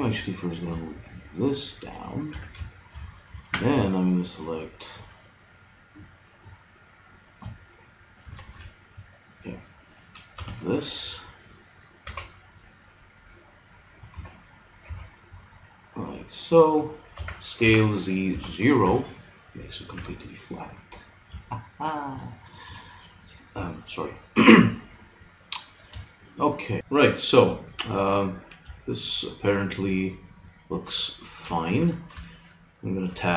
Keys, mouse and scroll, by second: 2.0 click, 2.4 a, 3.3 ctrl+Tab, 8.4 ctrl+Tab, 10.4 b, 12.0 e, 14.8 g, 17.2 s, 20.0 g, 22.8-24.6 middle drag, 23.5 a, 25.4-26.8 middle drag, 28.6 middle click, 31.8 Tab.